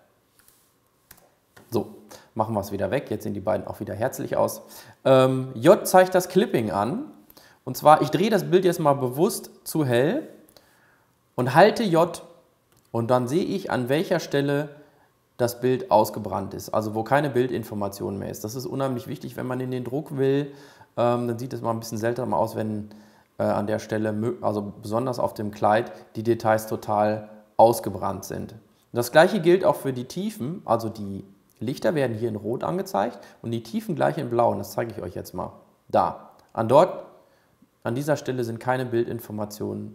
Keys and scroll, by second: 13.6 j.